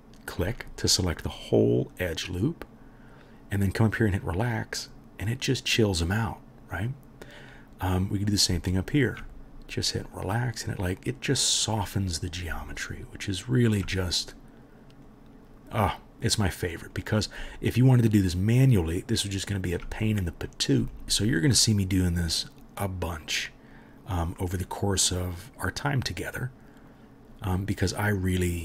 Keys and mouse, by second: 0.5-4.8 right drag, 4.8-8.3 middle drag, 8.3-20.9 alt+right drag, 8.7 alt+click, 8.7 alt+middle click, 10.0-12.8 drag, 10.0-12.8 middle drag, 13.1 alt+click, 13.1 alt+middle click, 15.1-17.0 drag, 15.1-17.0 middle drag, 18.2 alt+click, 18.2 alt+middle click, 20.9 alt+middle click, 21.1-22.0 right drag, 22.0-28.6 middle drag.